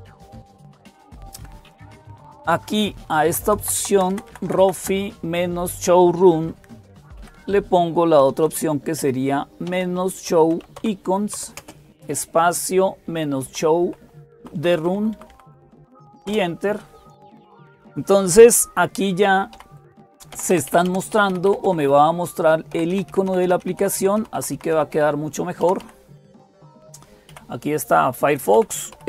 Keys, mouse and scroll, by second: 0.0-29.0 typing, 1.5 click, 3.1 Left, 3.3 Left, 3.4 Left, 3.6 Left, 3.8 Left, 4.1 Left, 4.3 Left, 4.4 Left, 4.6 Left, 13.3 Right, 14.0 Right, 16.1 Right, 19.0 End, 19.4 Down, 19.4 Up, 20.2 Down, 20.3 Down, 20.5 Down, 20.7 Down, 20.9 Up, 21.1 Up, 21.3 Up, 21.5 Up, 25.4 Down, 25.6 Down.